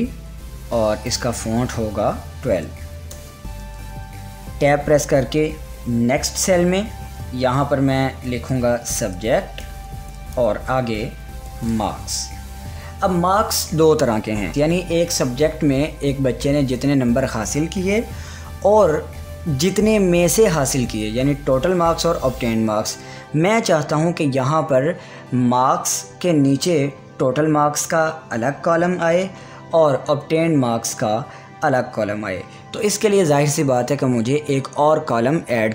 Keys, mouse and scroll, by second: 1.6 click, 2.3-3.2 typing, 3.6 Return, 4.5 click, 5.8 Tab, 8.4-10.6 typing, 10.9 Tab, 11.8-13.3 typing.